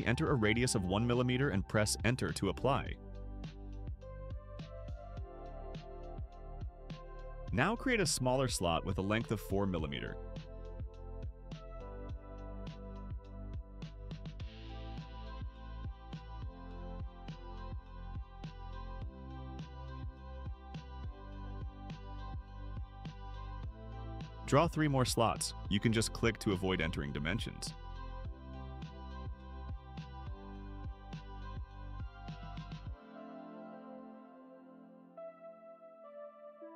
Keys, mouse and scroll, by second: 2.7 1, 4.0 Return, 10.4 click, 14.3 4, 15.1 Return, 16.4-17.8 typing, 17.8 Return, 20.2 1, 20.9 Return, 22.5 scroll up 2, 25.1 click, 28.3 click, 30.2 click, 33.8 click, 36.0 click.